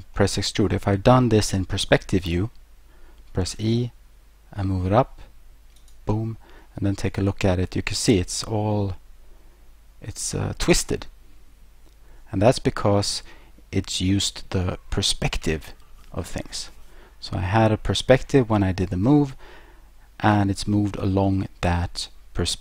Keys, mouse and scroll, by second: 0.2 middle click, 3.5 e, 5.8 click, 6.7 middle click, 14.3-14.9 scroll, 19.3 middle click.